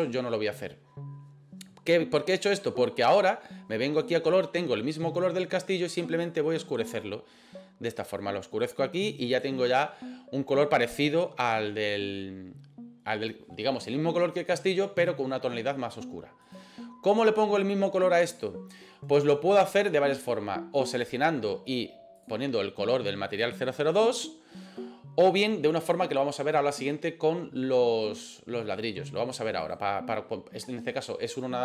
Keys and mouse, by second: 4.0 click, 16.5 right click, 20.8 right click, 22.3-23.5 drag, 29.6 right click.